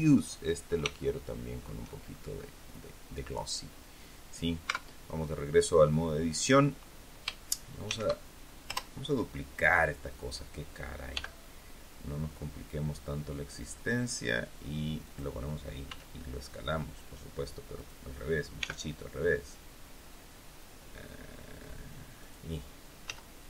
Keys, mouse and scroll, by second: 0.1 right click, 0.9 shift+middle click, 1.2 shift+scroll up 1, 1.9-2.7 shift+scroll up 1, 3.6 scroll down 1, 4.6 Tab, 7.8 shift+d, 8.6 Return, 11.0 g, 15.0 click, 15.8 s, 17.7 click, 18.5 g, 22.1 click, 23.0 z.